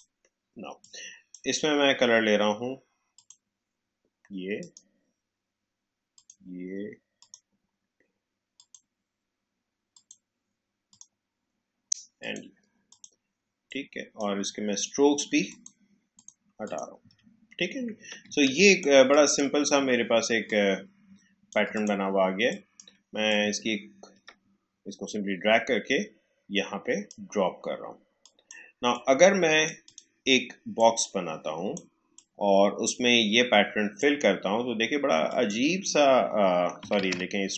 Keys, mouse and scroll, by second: 17.3 alt+scroll down 1, 18.2 space, 18.4 click, 18.7 space, 19.0 click, 20.4-35.2 shift+drag, 36.9 ctrl+z.